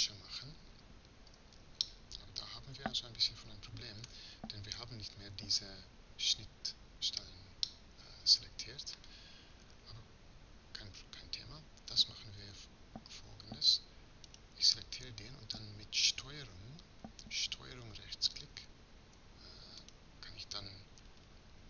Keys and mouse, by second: 1.1 z, 4.3 middle click, 9.5 a, 11.9 middle click, 12.1-14.1 drag, 14.1-16.0 right drag, 16.2-18.1 middle drag, 19.6-21.0 right drag, 21.0-21.6 middle drag.